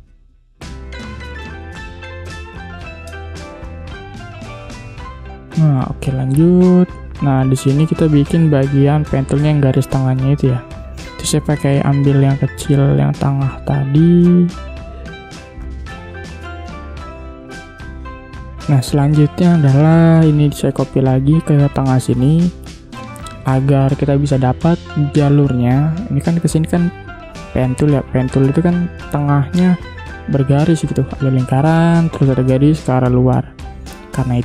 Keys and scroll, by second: 0.7 v, 2.5 i, 3.3 v, 6.7 space, 18.6 space.